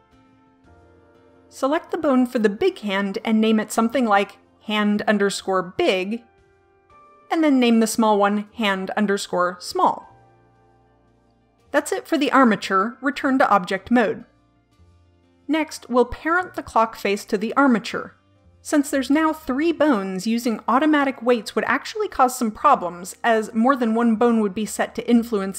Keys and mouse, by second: 0.0-3.7 drag, 3.7 middle click, 5.0-6.3 drag, 7.9 click, 9.2-10.3 drag, 10.3 l, 14.0 click.